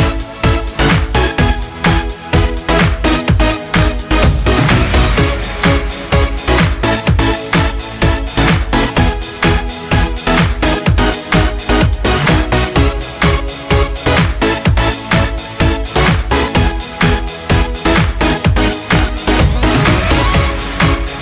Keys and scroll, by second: 13.7 ctrl+space, 19.6 ctrl+shift+e, 19.6 ctrl+z.